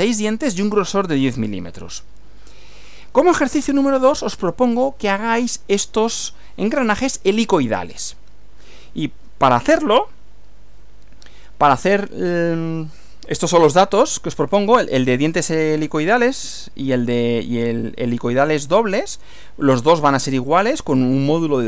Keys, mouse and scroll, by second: 1.7 Right, 10.8 Right.